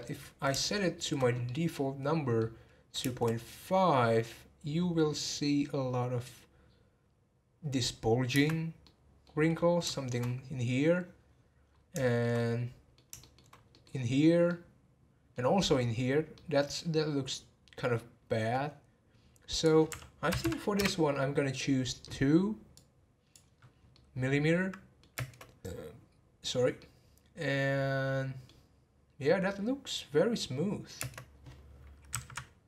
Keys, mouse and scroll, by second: 0.0-3.0 middle drag, 3.0 space, 8.4 space, 8.8-10.2 middle drag, 10.2-11.7 scroll up 1, 11.7 scroll down 2, 12.0-13.5 shift+middle drag, 13.5 scroll up 1, 13.7-19.3 middle drag, 19.5 click, 20.4 m, 22.8-23.5 drag, 23.5 scroll down 1, 23.9-25.1 middle drag, 25.1 space, 26.9-29.9 middle drag, 31.2 space, 32.1 Left, 32.3 Left.